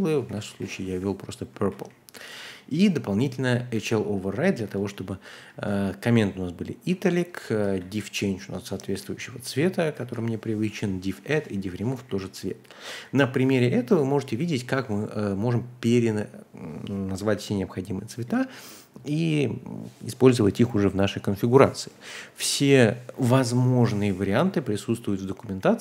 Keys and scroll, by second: 0.0-2.7 typing, 4.0-6.4 typing, 4.6 Escape, 6.9 Escape, 7.7-15.1 typing, 21.9-25.8 typing.